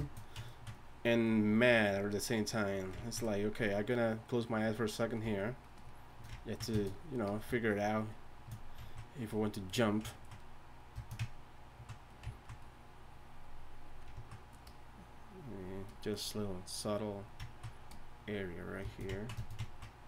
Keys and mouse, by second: 0.7-10.3 drag, 17.5-19.5 ctrl+drag.